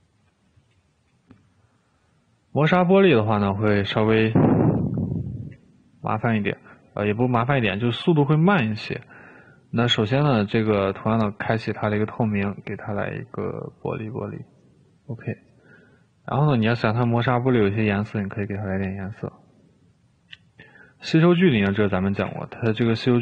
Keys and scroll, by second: 1.3 r, 5.7 Escape, 22.5 6.